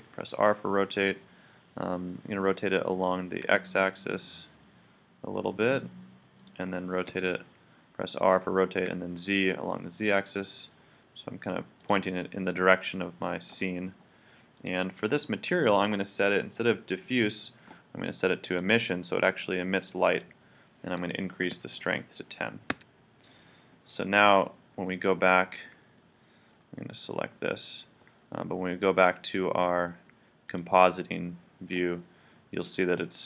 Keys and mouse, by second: 0.0 r, 6.4-8.2 drag, 7.1 r, 11.9-14.2 drag, 14.6-17.9 drag, 20.1-22.0 drag, 26.0 middle click, 26.9-28.7 right drag, 29.0 click.